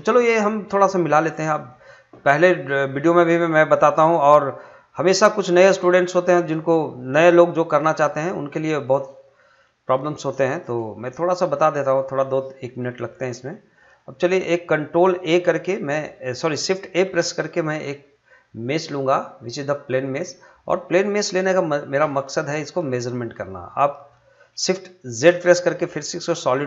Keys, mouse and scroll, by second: 0.8 click, 1.5 middle click, 2.9-8.2 drag, 8.2 middle click, 9.2-9.6 scroll down 1, 9.6 middle click, 10.2-10.8 scroll down 1, 11.0 shift+middle click, 11.7-12.1 scroll down 1, 12.9 shift+middle click, 16.4 shift+Num_Lock, 17.0 shift+a, 19.5 click, 22.0 s, 23.3 click, 25.2 shift+z, 25.9 middle click.